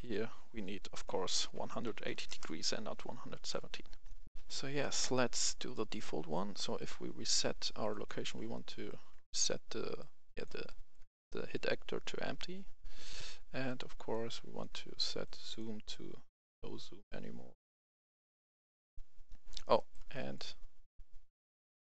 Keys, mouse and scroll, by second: 1.0-1.8 typing, 2.2 Return, 3.2 right click, 3.6-4.0 scroll down 1, 4.0 right click, 4.3 F10, 4.7 right click, 5.2-5.7 scroll up 1, 5.7 right click, 6.2-10.6 drag, 10.6 right click, 11.4-13.6 drag, 19.7 right click, 20.0 click.